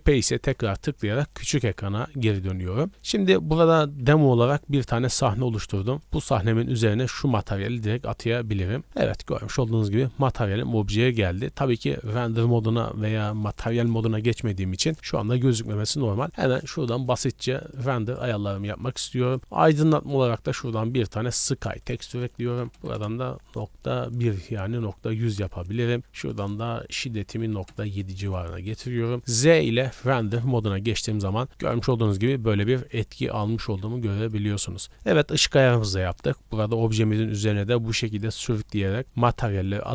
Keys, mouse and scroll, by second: 3.0 middle drag, 4.9 middle click, 5.8 right click, 6.7 click, 9.7-10.1 middle drag, 16.5-17.2 drag, 17.6-18.4 drag, 19.2 click, 20.0-20.6 drag, 21.8-22.9 drag, 26.2-27.7 drag, 28.7 z, 30.9 middle drag, 31.2 scroll up 1, 31.5 middle drag, 32.7 click, 33.6 click, 34.9 middle click, 37.0 middle drag, 37.7 click, 39.6 click.